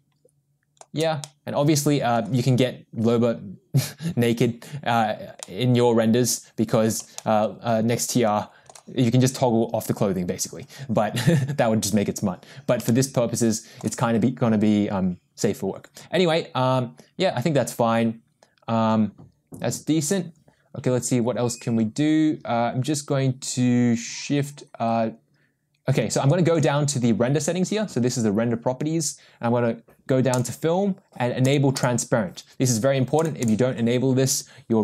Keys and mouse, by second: 1.2 middle click, 5.5-6.9 middle drag, 7.2-8.7 shift+middle drag, 12.9 shift+middle click, 30.3 click, 31.4 click, 31.8 click, 33.2 click, 33.4 click.